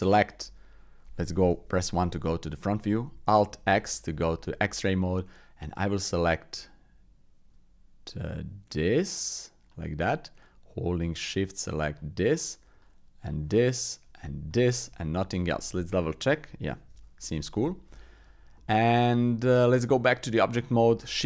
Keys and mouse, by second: 1.5 KP_1, 2.2 shift+click, 3.6 alt+z, 6.2-9.7 drag, 11.1 shift+click, 12.9 shift+click, 13.9 shift+click, 15.0-16.3 drag, 16.3 middle click, 16.9 alt+z, 17.2 middle click, 18.5 middle click, 19.4 Tab, 20.9 shift+a.